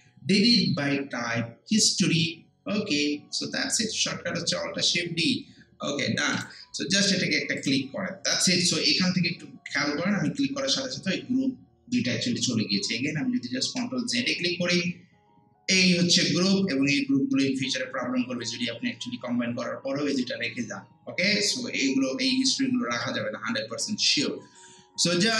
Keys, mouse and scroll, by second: 13.2 click, 13.6 ctrl+z.